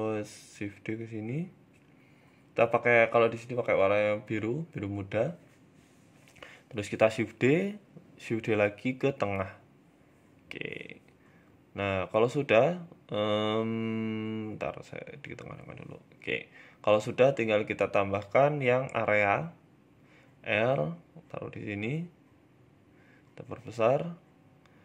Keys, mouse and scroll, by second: 0.4 middle click, 0.8 shift+middle click, 1.1 middle click, 1.9 g, 2.8 click, 5.2 shift+d, 6.7 middle click, 7.0 scroll down 2, 7.4 middle click, 8.2 shift+d, 9.7 middle click, 11.5 middle click, 11.5 g, 12.4 middle click, 13.2 g, 15.1-15.9 scroll down 5, 15.4 middle click, 15.9 shift+a, 18.8 KP_3, 19.6 r, 20.6 g, 22.3 middle click, 23.1 click, 24.0 middle click, 24.2 scroll down 2, 24.4 middle click.